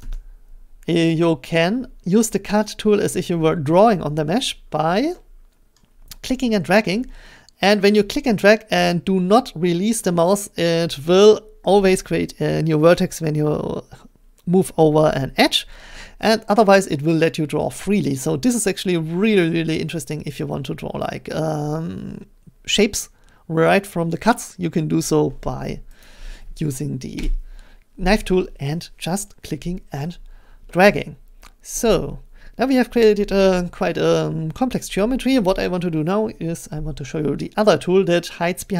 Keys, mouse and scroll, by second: 0.0 a, 4.3-5.6 middle drag, 6.2 scroll, 24.3 click, 26.0 ctrl+click, 27.2 Return, 33.9-36.9 scroll.